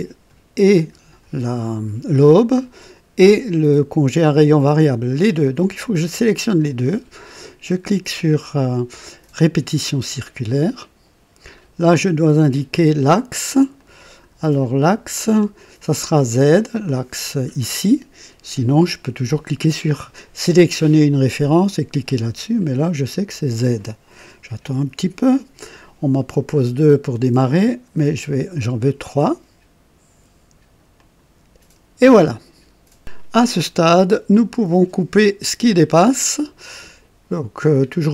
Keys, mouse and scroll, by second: 9.3 click, 11.6-11.9 scroll down 2, 13.7-14.4 drag, 15.7 click, 23.0 click, 27.6 scroll up 2, 30.9 click, 34.2 click.